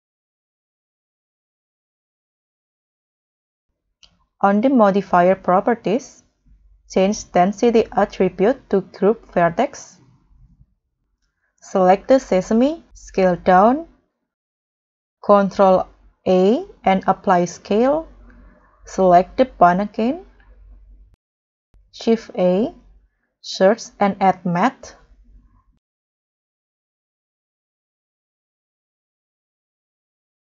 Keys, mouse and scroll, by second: 10.8 scroll down 1, 13.3 s, 16.5 ctrl+a, 18.8 scroll up 1, 19.0 scroll down 2, 19.6 scroll down 1, 19.7-20.7 scroll up 6, 20.7 scroll down 4, 21.0 scroll up 4, 23.6-24.3 typing, 28.3 scroll down 4, 28.5-30.4 scroll up 7.